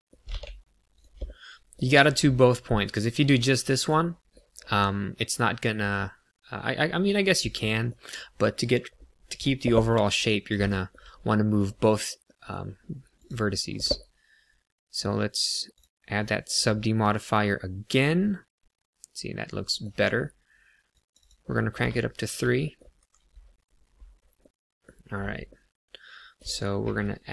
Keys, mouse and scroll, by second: 0.2 g, 0.9 click, 1.2 middle click, 2.2 middle click, 3.9 middle click, 4.9 middle click, 7.5 middle click, 10.7 shift+middle click, 11.2 middle click, 12.2 middle click, 13.1 click, 16.7 middle click, 20.8 click, 21.1 click, 21.8 shift+middle click, 22.5 middle click, 22.9 KP_1, 24.3 middle click, 25.0 scroll down 1, 25.4 middle click, 26.8 ctrl+r.